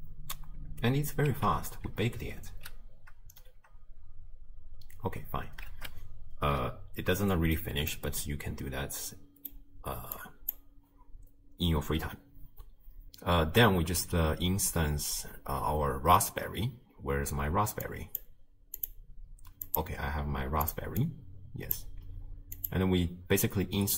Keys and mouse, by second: 1.3 space, 5.1 space, 5.7 shift+space, 8.0-9.6 drag, 10.2 click, 17.9 click, 19.8 click, 20.7 click, 22.6-23.9 drag.